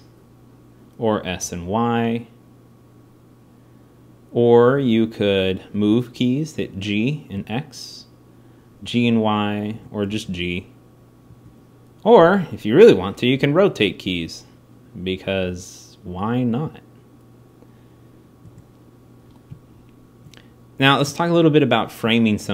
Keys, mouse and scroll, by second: 5.6 g, 9.9 g, 12.1-13.4 drag, 13.1 r.